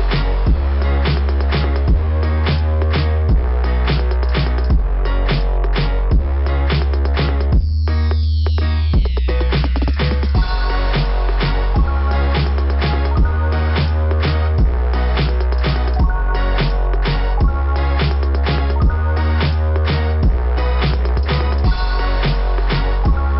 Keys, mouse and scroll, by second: 1.5 scroll down 2, 2.9 scroll down 2, 3.9 click, 4.2 click, 6.2 scroll up 2, 7.2-7.6 scroll up 4, 10.6 click, 10.7 click, 11.4 scroll down 2, 13.5 click, 20.6 click, 20.6 [.